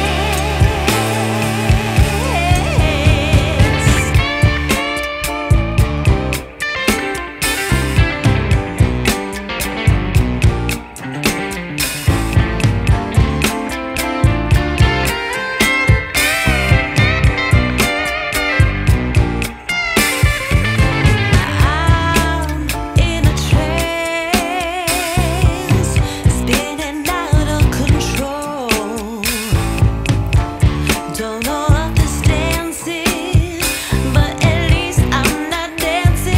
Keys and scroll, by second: 4.7 space, 12.5 space, 16.5 Escape, 21.9 ctrl+Page_Down, 30.4 ctrl+q, 33.1 space, 34.3 space, 35.2 Delete.